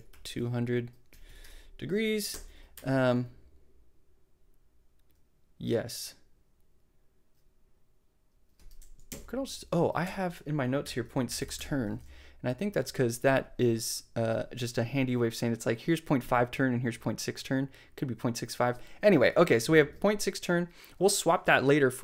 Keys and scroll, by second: 0.0-2.7 typing, 9.1 alt+shift+Left, 10.0 alt+shift+., 10.6-12.0 typing.